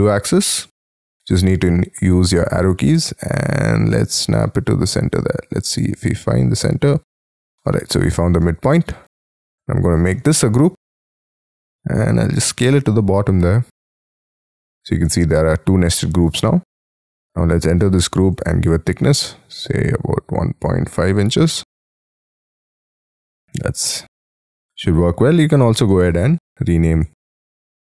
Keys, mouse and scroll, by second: 0.6-1.0 scroll up 5, 1.0 middle click, 1.5-1.8 scroll down 4, 1.8 scroll up 6, 5.2-7.5 scroll down 12, 7.6 middle click, 8.5 space, 8.9 double click, 10.1 g, 10.8 s, 12.1-13.6 scroll up 11, 13.6-14.6 scroll down 12, 14.6 scroll up 2, 16.0 middle click, 16.5 space, 16.9 double click, 17.3-17.8 scroll up 6, 17.8 p, 19.0 1, 20.7 ., 20.9 5, 21.8 shift+', 22.3 Return, 22.9 space, 23.2-23.6 scroll down 9, 23.6 Escape, 25.7-27.8 typing.